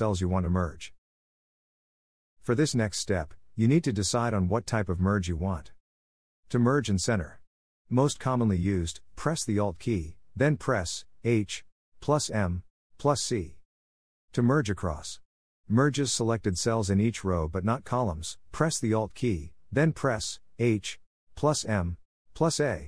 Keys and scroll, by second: 0.3 shift+Right.